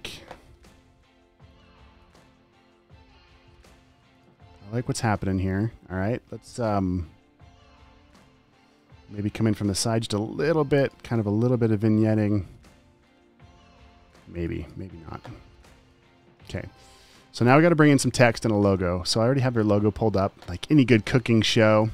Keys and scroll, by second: 0.1 alt+space, 0.9 g, 4.0 super+z, 4.2 space, 5.3 v, 5.7 space, 8.5 g, 12.5 super+z, 16.5-18.7 typing, 21.7 space.